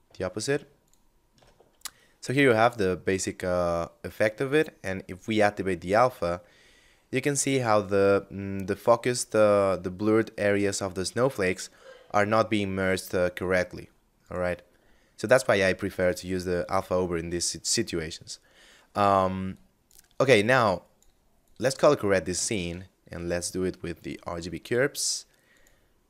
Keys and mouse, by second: 4.1 click, 5.6 middle click, 13.3 click, 13.8 x, 14.6 ctrl+shift+click, 17.9 middle click, 18.7 click, 21.7 shift+a, 23.1 click.